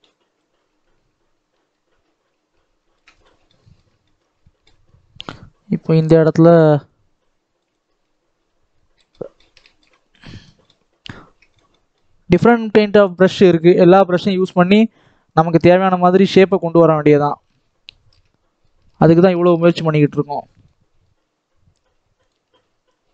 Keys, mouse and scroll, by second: 0.3-3.1 shift+drag, 3.1 scroll down 2, 3.2 middle click, 4.0 scroll up 1, 4.3 shift+middle click, 4.8-6.0 scroll up 2, 6.0-9.0 drag, 9.0-10.5 middle drag, 10.5 scroll up 1, 10.6 middle click, 11.3 scroll up 1, 11.4 middle click, 12.2-18.2 drag, 18.2 middle click, 18.8-19.8 shift+drag, 19.8 middle click, 20.7-22.2 scroll up 3, 22.2-23.1 drag.